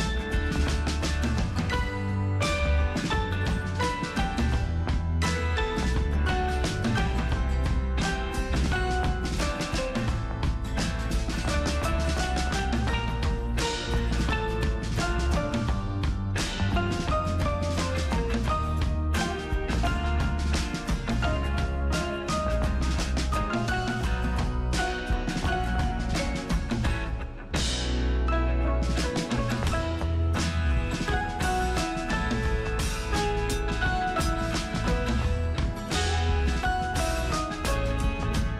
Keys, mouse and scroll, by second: 5.9 click, 6.4 alt+super+scroll down 1, 7.8 alt+super+scroll up 1, 12.1 alt+super+click, 17.3 alt+super+scroll up 1, 18.2-18.8 alt+super+scroll up 1, 20.0 alt+super+click, 23.4 super+[, 25.9 alt+super+click, 30.7 alt+super+scroll down 1, 32.2 alt+super+scroll up 1, 33.5 alt+super+click, 35.7 alt+super+scroll down 1, 36.7 alt+super+scroll up 1, 38.2 alt+super+click.